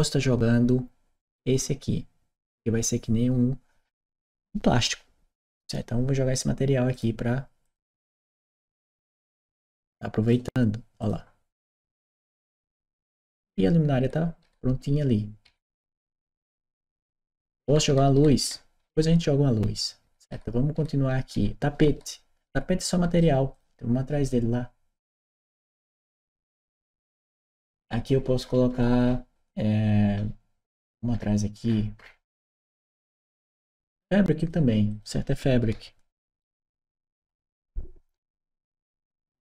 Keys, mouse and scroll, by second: 7.4 click, 9.0-10.1 drag, 10.8 click, 12.0-23.0 right drag, 13.2 a, 13.7 w, 14.7 s, 18.7 s, 23.3 click, 25.1 click, 26.4 click, 27.6-28.6 scroll down 2, 28.6-28.9 scroll up 2, 30.9-31.4 scroll down 2, 31.4 middle click, 31.5 scroll up 2, 32.9 click, 34.2 click, 34.7 click, 35.5-37.3 typing.